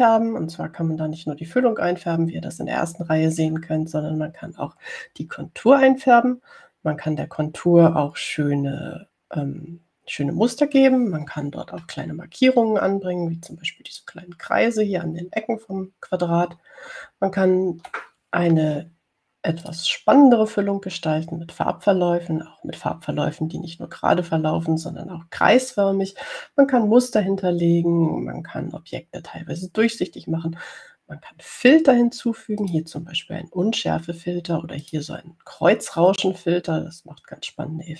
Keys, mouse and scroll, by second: 13.3-13.6 ctrl+scroll up 2, 15.2 click, 18.7 ctrl+scroll down 2, 21.0 click, 33.9 click, 36.1 click.